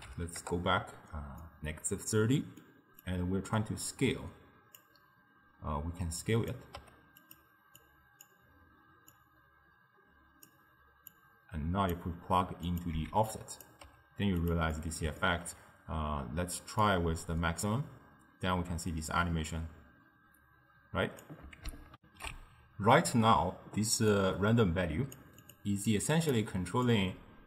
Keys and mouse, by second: 1.4-3.1 middle drag, 3.1 click, 6.3 click, 6.9 g, 7.9 click, 9.2 click, 11.2 click, 12.7 click, 13.0 x, 13.9 g, 14.8-16.9 middle drag, 16.9-19.9 drag, 22.0 ctrl+alt+shift+w, 24.1 click, 25.5 click, 26.0 click, 26.9-27.4 drag.